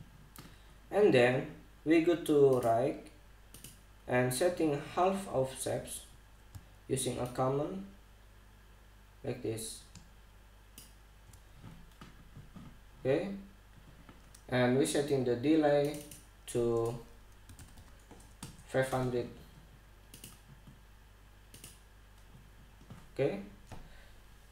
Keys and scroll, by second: 17.9-18.7 typing, 19.0 Return.